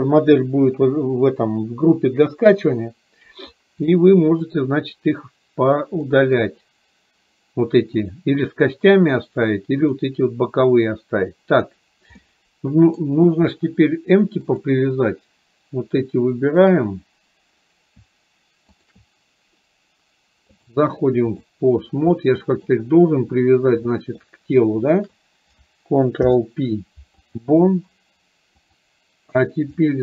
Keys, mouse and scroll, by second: 3.9-4.6 middle drag, 6.2 middle click, 8.1 click, 12.3 middle click, 16.7 shift+click, 18.9 shift+click, 20.7-21.6 drag, 22.3-22.7 middle drag, 23.9 middle drag, 24.9 shift+click, 28.7 click, 29.8-30.0 middle drag.